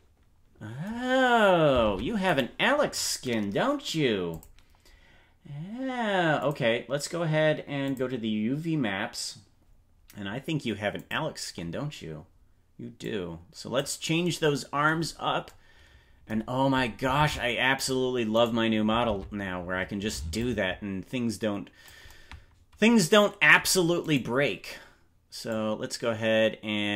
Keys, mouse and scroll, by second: 1.9 ctrl+Tab, 2.3 right click, 4.2 click, 6.4 click, 7.8 click, 10.9 click, 12.9 click, 15.1 scroll up 3, 17.1 ctrl+Tab, 18.4 right click, 19.2 ctrl+Tab, 20.3-21.9 drag, 24.0 right click, 25.4-26.9 drag.